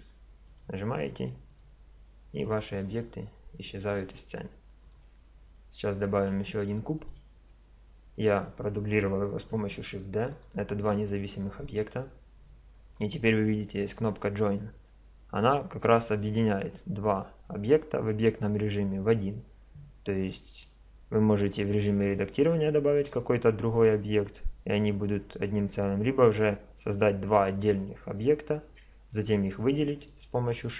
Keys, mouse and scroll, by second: 1.5 right click, 2.3 x, 4.8 right click, 5.6 click, 5.8 right click, 6.0 shift+d, 9.7 click, 9.9-11.4 middle drag, 11.4 right click, 30.0 right click.